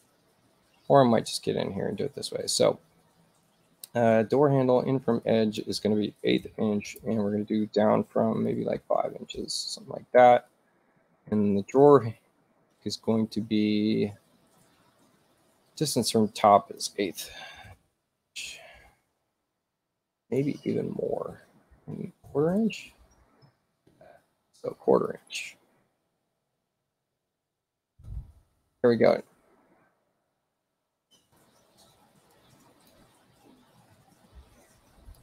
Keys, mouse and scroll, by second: 5.2 click, 6.3 1, 6.9 8, 7.0 Tab, 8.5 5, 8.8 Tab, 15.8 click, 16.4 click, 17.6 1, 18.1 8, 20.1 click, 21.5-22.8 typing, 25.0 click, 26.1-27.6 typing, 32.3 click, 35.1 click.